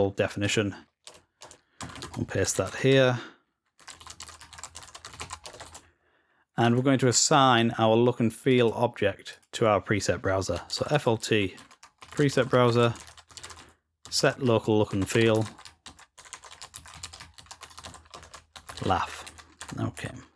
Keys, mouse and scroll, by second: 0.2 click, 8.3 click, 8.5 click.